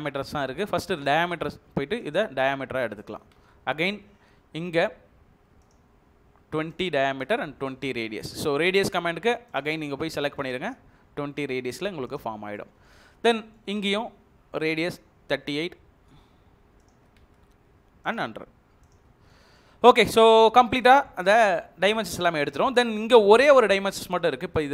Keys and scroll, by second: 3.4 space, 7.1 space, 12.4 Escape, 13.8 space, 17.2 space, 19.2 Escape.